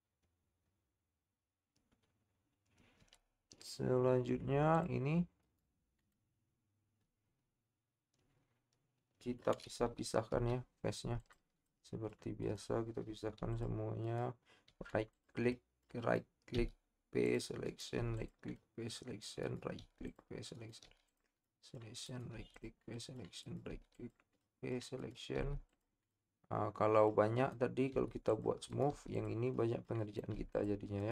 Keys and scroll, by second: 13.4 p.